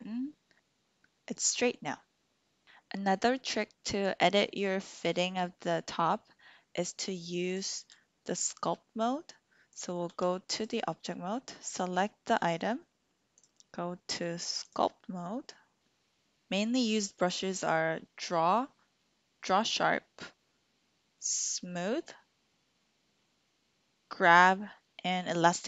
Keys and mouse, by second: 7.6-9.4 drag, 9.8 click, 10.0 Tab, 10.5 click, 11.6 click, 13.4-15.8 drag.